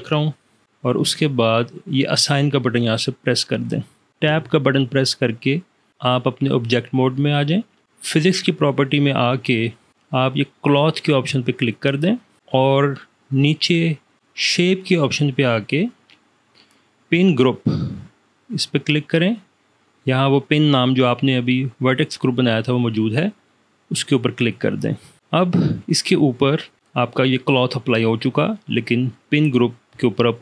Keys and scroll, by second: 0.7 Return, 4.4 Tab.